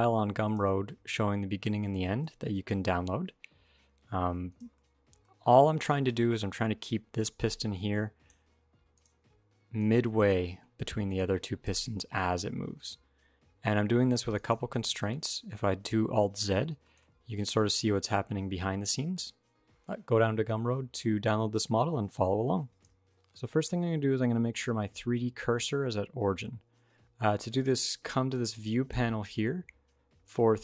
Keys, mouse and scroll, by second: 0.8 middle click, 1.8 g, 4.5 middle click, 5.0 scroll up 2, 5.2 middle click, 5.7 shift+middle click, 6.9 middle click, 6.9 d, 7.4 click, 8.1-11.8 typing, 8.8 click, 9.6 click, 10.9 click, 14.6 alt+r, 14.8 alt+g, 16.2 alt+z, 16.6 shift+middle click, 17.1 g.